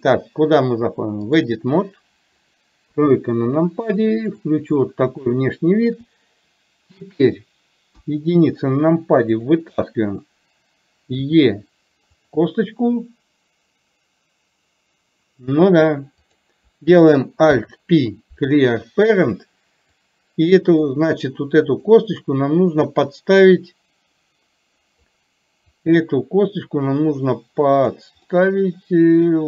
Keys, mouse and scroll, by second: 3.0 KP_3, 5.3 shift+middle click, 8.0 KP_1, 16.3 click, 20.1 click, 21.7 click, 22.8-25.1 drag, 25.8-28.1 drag, 28.3-29.4 middle drag.